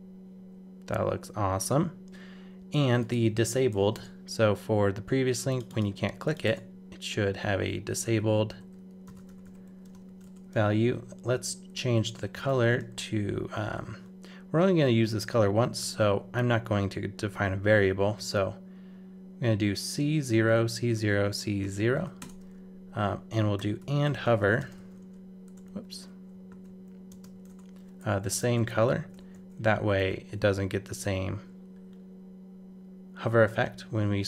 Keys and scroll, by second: 1.6 super+Tab, 25.7 super+z, 28.7 super+Left, 29.0 shift+super+Right, 29.2 super+c, 30.0 super+v.